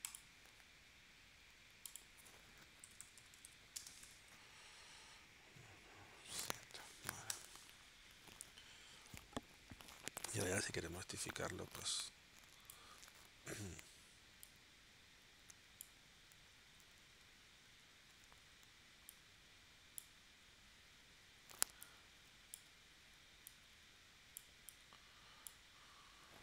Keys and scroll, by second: 2.8-4.0 typing, 6.4 7, 7.3 Return, 10.2 shift+w.